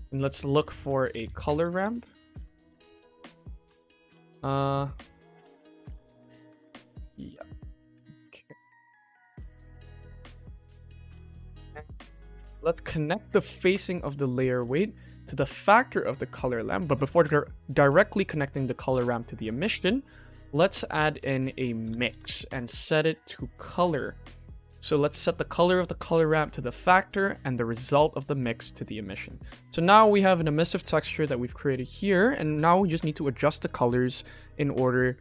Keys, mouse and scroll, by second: 1.6 BackSpace, 1.8 BackSpace, 3.0 BackSpace, 3.1 BackSpace, 5.2 shift+middle click, 6.0 click, 6.3 g, 7.0 click, 7.2 g, 12.2 click, 13.4-15.9 drag, 16.3 shift+middle click, 17.3 click, 18.1 shift+middle drag, 19.5 shift+a, 23.0-23.5 drag, 23.7-24.3 drag, 25.2 click, 25.6-26.6 drag, 27.5-28.6 drag, 29.6 shift+middle click, 31.6 shift+middle click.